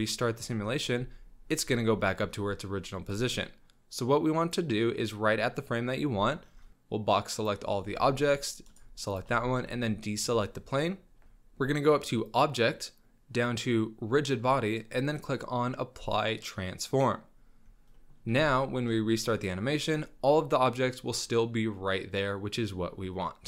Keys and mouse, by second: 0.7 middle drag, 0.9 z, 3.0-3.4 drag, 6.7-7.6 drag, 6.7 z, 7.9 b, 9.1 shift+drag, 9.4 b, 10.7 click, 12.4-17.5 drag, 17.9 drag, 18.3 z, 19.3 click, 19.8 middle click, 19.9 drag, 20.0-20.7 middle drag, 20.7-21.5 drag, 21.5 drag, 22.1-22.5 middle drag, 22.6-23.2 drag, 23.4 middle click.